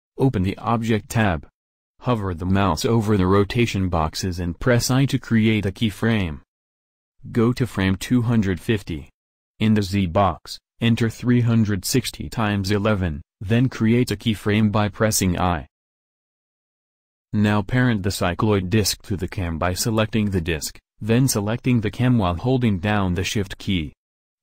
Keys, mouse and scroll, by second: 4.9 i, 13.6 1, 15.4 i.